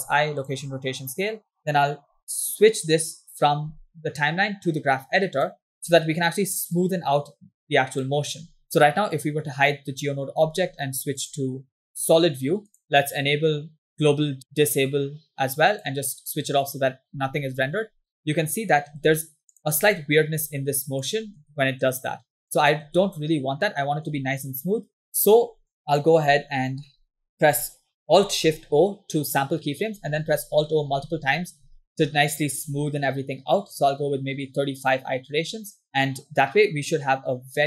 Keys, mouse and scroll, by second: 0.2 i, 3.0-4.3 drag, 5.6 click, 7.4-8.6 drag, 9.4 click, 11.5 click, 12.8-14.5 drag, 15.9 click, 17.8 space, 19.0-21.9 typing, 19.6 click, 21.0-21.4 drag, 22.4-22.9 drag, 23.0 space, 24.1 space, 26.0 drag, 26.4-26.9 scroll down 3, 26.9 middle click, 27.2 ctrl+middle click, 28.5 alt+shift+o, 30.2 alt+o, 30.3 alt+o, 30.5 alt+o, 30.7 alt+o, 30.9 alt+o, 31.0 alt+o, 31.1 alt+o, 31.4 alt+o, 31.6 alt+o, 31.7 alt+o, 31.9 alt+o, 32.1 alt+o, 32.3 alt+o, 32.5 alt+o, 32.7 alt+o, 32.9 alt+o, 33.0 alt+o, 33.3 alt+o, 33.5 alt+o, 33.6 alt+o, 33.7 alt+o, 33.9 alt+o, 34.0 alt+o, 34.2 alt+o, 34.3 alt+o, 34.4 alt+o, 34.5 alt+o, 34.9 alt+o, 35.3 alt+o, 35.5 alt+o, 37.0-37.6 drag.